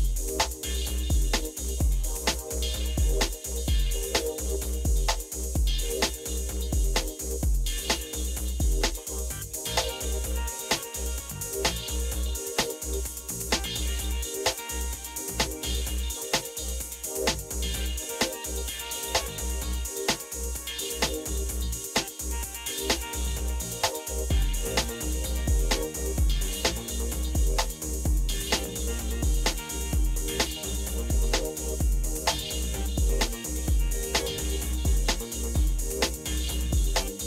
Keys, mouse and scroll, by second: 0.3-0.9 Up, 2.3 Up, 2.8-4.0 Up, 4.8-5.8 Up, 6.4 Up, 23.0-24.2 Down, 23.7 Down, 25.1 Down, 25.5-28.9 Down, 29.9 Down, 29.9 Up, 30.3 Up, 31.7 Return.